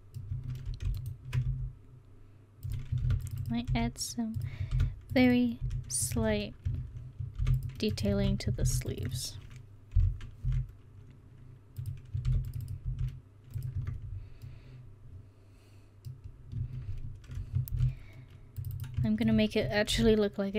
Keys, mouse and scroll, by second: 0.4 Tab, 1.5 s, 3.1 ctrl+r, 3.7 s, 4.8 ctrl+r, 5.7 s, 6.2 Tab, 6.7 Tab, 7.4 ctrl+r, 8.2 ctrl+z, 8.6 ctrl+r, 10.0 o, 10.5 s, 12.3 ctrl+r, 12.9 s, 13.8 Tab, 16.6 Tab, 17.8 ctrl+r, 20.0 s.